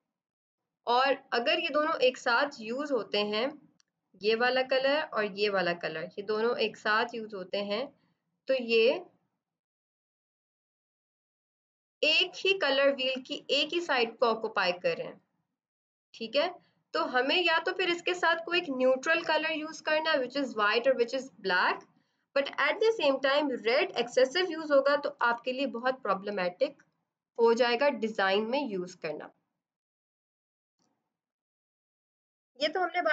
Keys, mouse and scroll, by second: 4.2 click, 25.1 b, 27.2 F7, 28.3 click, 28.3 click.